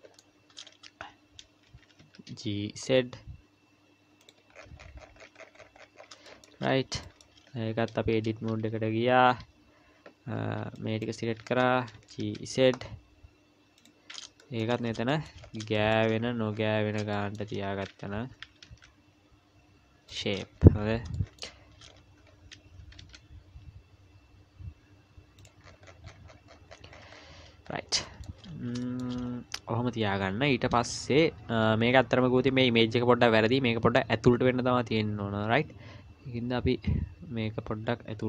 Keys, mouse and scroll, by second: 0.5-1.2 scroll up 3, 1.7 g, 4.5-6.3 scroll down 42, 6.3 shift+middle click, 6.7 scroll up 2, 7.0 shift+middle click, 7.5-8.1 scroll down 2, 8.1 Tab, 10.6 b, 12.0 g, 14.4 shift+middle click, 14.8-17.0 scroll up 17, 15.1 shift+middle click, 15.8 shift+middle click, 17.1 shift+middle click, 18.4 g, 20.4-21.1 scroll up 14, 21.1 shift+middle click, 21.8-22.3 scroll up 1, 22.8-23.9 scroll up 1, 22.8 g, 25.7-27.7 scroll down 35, 27.7-28.0 scroll down 8, 28.0 shift+middle click, 28.5 scroll down 1, 28.8 shift+middle click, 29.2-30.8 scroll up 3, 30.8-31.1 scroll up 1, 31.5 Tab, 31.9-32.4 scroll up 2, 35.5-36.1 scroll down 3.